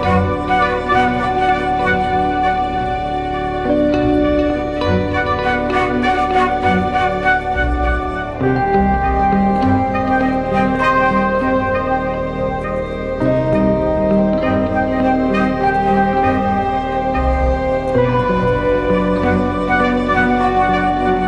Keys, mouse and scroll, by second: 2.8-4.3 typing, 5.2 double click, 8.7-9.0 typing, 13.6 double click, 19.9 double click.